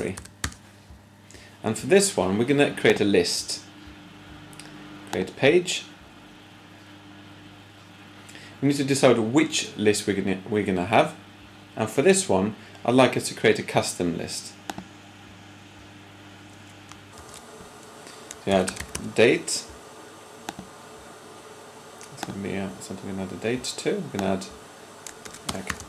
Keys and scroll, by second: 0.0-0.3 typing, 17.0 p, 18.5-18.9 typing, 25.2-25.8 typing.